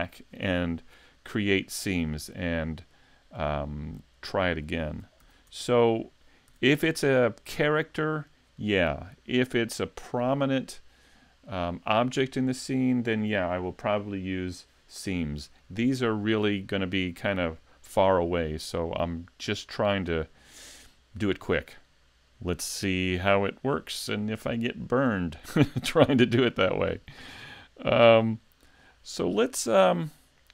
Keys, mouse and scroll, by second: 4.6 shift+middle click, 5.2 a, 5.5 Tab, 6.5 a, 7.0 shift+middle click, 7.9 scroll down 1, 19.2 shift+middle click, 21.3 middle click, 24.4 middle click, 27.1 shift+middle click, 27.6 middle click.